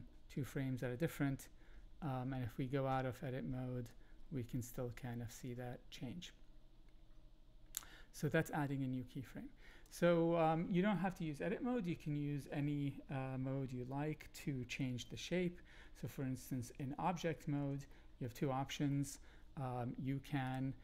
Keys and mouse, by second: 1.9 Tab, 3.9-9.8 drag, 17.2 shift+middle click, 17.9 middle click, 18.9 shift+middle click, 20.4 shift+click.